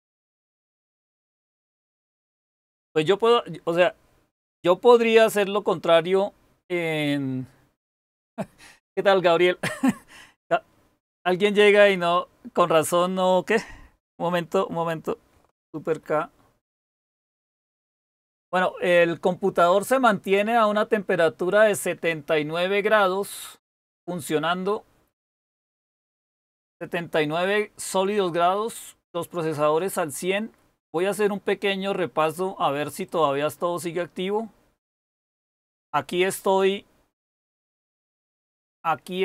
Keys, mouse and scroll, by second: 15.8 super+k.